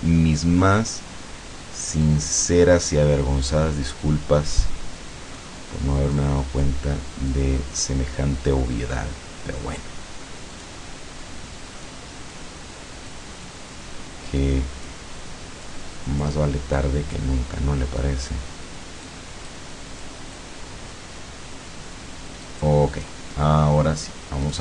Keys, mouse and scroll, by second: 2.1 click, 4.7 click, 6.2 click, 7.3 click, 10.6 click, 11.9 click, 13.1 click, 14.5 click, 15.7 click, 16.8 click, 18.1 click, 19.1 click, 20.1 click, 22.5 click, 24.5 click.